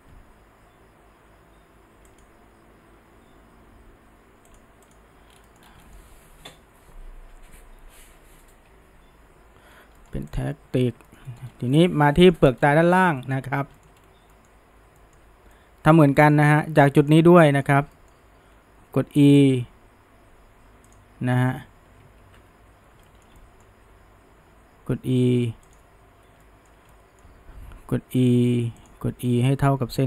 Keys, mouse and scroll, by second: 2.1 click, 4.5 click, 4.9 click, 5.3 scroll down 1, 5.5 middle drag, 5.6 scroll up 1, 5.8-8.9 shift+middle drag, 9.7 scroll up 1, 10.0-10.3 middle drag, 10.3 drag, 10.7 Tab, 11.1-11.5 shift+middle drag, 11.5 scroll up 1, 11.7-12.1 shift+middle drag, 12.1 scroll down 3, 12.3-12.6 middle drag, 12.6-13.0 scroll up 1, 13.0-14.0 shift+middle drag, 14.0-14.3 scroll up 1, 14.3-15.2 middle drag, 15.6-17.0 middle drag, 17.0 click, 17.4-19.3 middle drag, 19.3 e, 22.2 ctrl+z, 23.1-23.9 shift+middle drag, 23.9 e, 26.4-27.7 shift+middle drag, 27.7 e, 29.1 e.